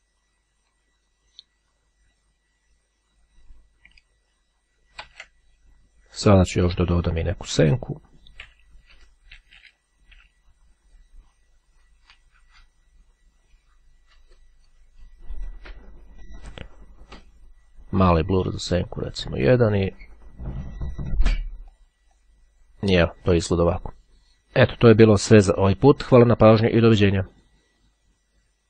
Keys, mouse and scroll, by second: 0.8-2.8 drag, 4.2 ctrl+d, 7.2 click, 8.4 Page_Down, 12.1 click, 14.7-16.8 drag, 17.4 click, 18.5 click, 21.8-22.8 drag, 27.5 click.